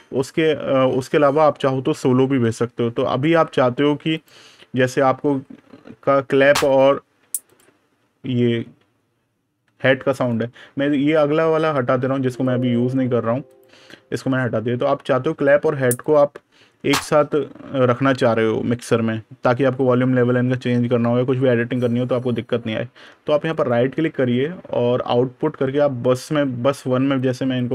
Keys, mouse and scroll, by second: 10.0 right click, 12.2 click, 15.9 click, 22.8 super+KP_Add, 23.3 right click, 27.0 click.